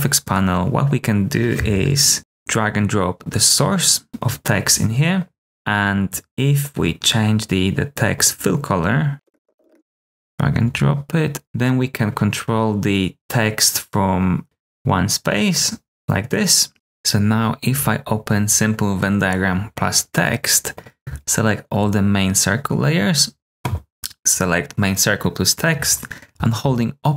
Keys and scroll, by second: 2.1 typing, 9.1-10.0 typing, 11.4 v.